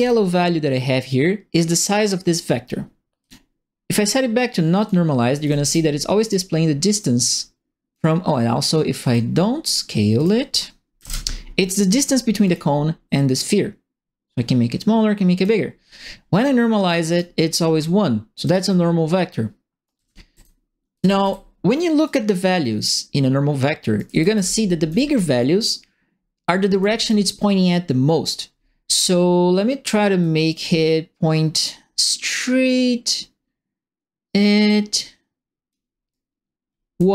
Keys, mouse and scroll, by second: 0.0-0.2 typing, 3.2 click, 4.8 click, 5.1-5.9 typing, 5.3 right click, 6.2 click, 7.3 click, 9.0 click, 10.1 click, 10.9 KP_1, 12.4 click, 13.4-15.4 drag, 17.1 click, 18.4 click, 19.7-21.5 typing, 19.8-21.9 right drag, 21.9 click, 23.9-24.8 typing, 23.9-25.1 right drag, 26.4 right click, 26.6 s, 28.9 click, 30.2-35.7 drag, 36.1-37.1 right drag, 36.7-37.1 typing.